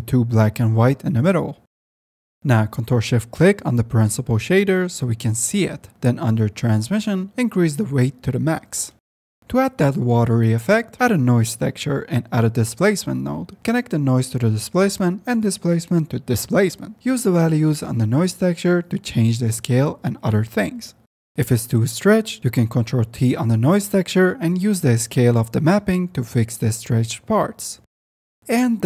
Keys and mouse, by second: 0.4-0.8 drag, 1.1 click, 1.5 click, 2.1 click, 2.7 click, 5.7 shift+drag, 6.7 click, 7.2-8.3 drag, 9.7 shift+a, 12.4 shift+a, 14.6-15.8 drag, 16.0 click, 16.2-18.1 drag, 18.3 click, 19.4-20.6 drag, 20.7 click, 23.0 ctrl+t, 23.5 click, 24.6 drag, 25.1-28.0 shift+drag.